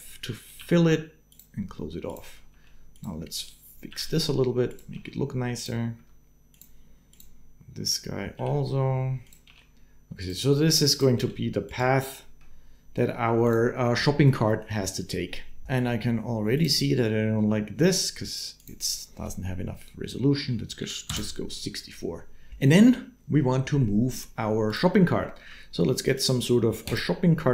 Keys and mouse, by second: 0.4 g, 1.9 click, 2.8 g, 3.7 r, 4.7 g, 5.7 s, 8.2 r, 9.3 g, 11.0 g, 13.2 right click, 18.4-20.9 right drag, 25.2 shift+a.